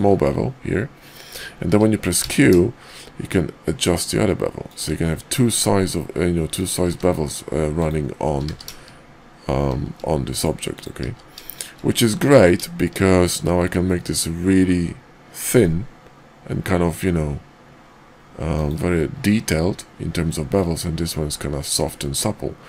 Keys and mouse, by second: 6.5 click, 6.9 q, 10.7 click, 11.1 q, 22.1-22.6 middle drag.